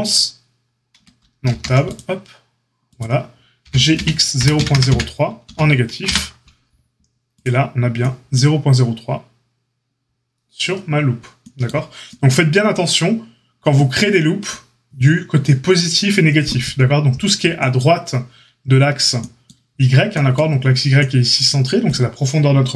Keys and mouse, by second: 0.9 Tab, 1.4 ctrl+r, 3.6 g.